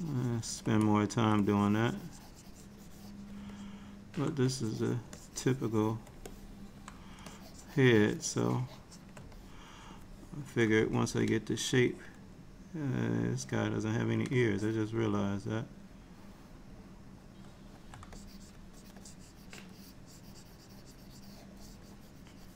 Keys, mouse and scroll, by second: 0.9 middle click, 1.5 click, 2.2 click, 3.6 middle click, 4.5 click, 5.2 shift+click, 6.4 middle click, 7.3 shift+click, 8.2 shift+click, 9.4 middle click, 11.8 click, 12.0 click, 13.5 middle click, 14.4 click, 14.7 click, 15.3 middle click, 18.2 ctrl+click, 18.8 ctrl+click, 19.1 ctrl+click, 19.6 ctrl+click, 19.8 ctrl+click, 20.6 ctrl+click, 20.8 ctrl+click, 21.2 ctrl+click.